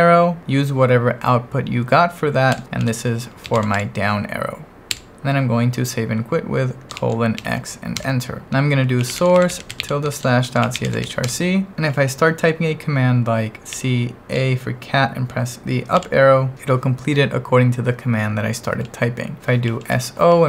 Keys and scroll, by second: 2.5 Escape, 2.8-4.3 typing, 4.9 Escape, 7.0 shift+;, 7.4 x, 8.0 Return, 8.4-11.5 typing, 13.7 c, 14.4 a, 15.9 Up, 19.4 BackSpace, 19.7 s, 19.9 o.